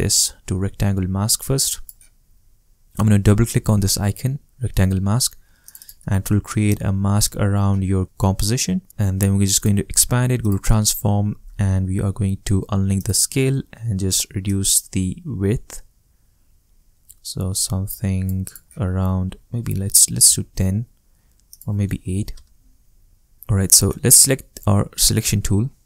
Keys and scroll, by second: 19.4 i, 20.0 0, 20.2 Return, 22.0 8, 22.3 Return.